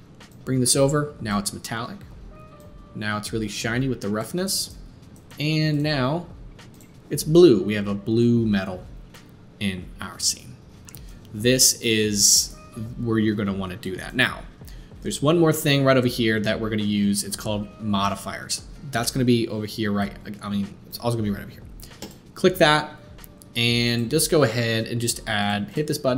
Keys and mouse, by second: 5.9-22.0 middle drag, 22.0 click, 22.1-23.8 middle drag, 23.8-25.5 drag, 25.5 middle click, 25.7-26.1 drag.